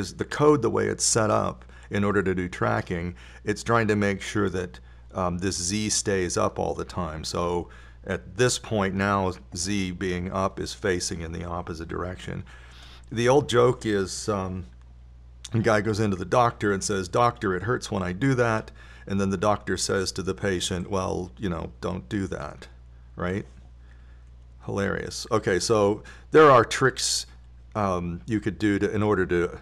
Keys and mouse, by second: 1.0-3.0 drag, 17.2 KP_7, 17.3 KP_7, 25.6 KP_3.